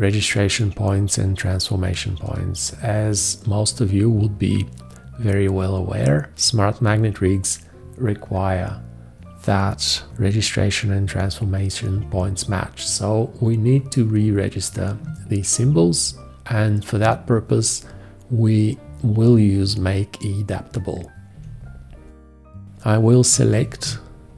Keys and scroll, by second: 21.3 v.